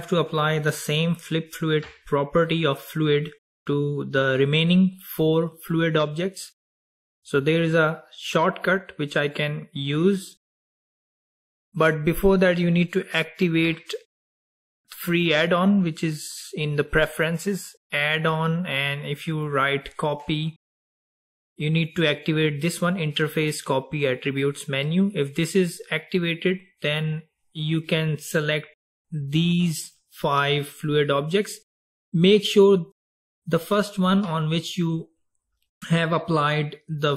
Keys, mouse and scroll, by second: 12.2-15.4 drag, 28.5 drag.